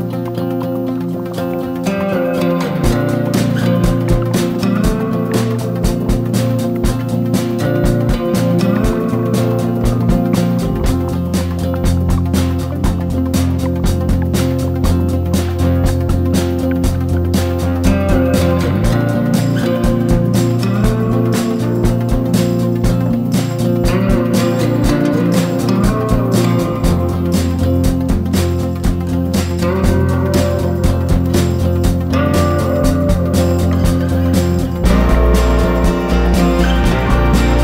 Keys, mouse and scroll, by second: 5.5 ctrl+d, 6.3-10.9 drag, 12.2 shift+click, 15.7 ctrl+g, 16.6 click, 18.4 ctrl+d, 18.8-20.2 drag, 20.4 ctrl+d, 20.7 ctrl+d, 21.1 ctrl+d, 21.4 ctrl+d, 22.0 click, 22.8 shift+click, 23.7 shift+click, 24.1 click, 25.1 shift+click, 25.4 shift+click, 25.7 shift+click, 26.0 shift+click, 26.7 shift+click, 27.2 shift+click, 27.6 shift+click, 28.4 click, 29.7 ctrl+g, 30.9 click, 35.8 Down, 35.9 Down, 36.0 Down, 37.0 ctrl+shift+g.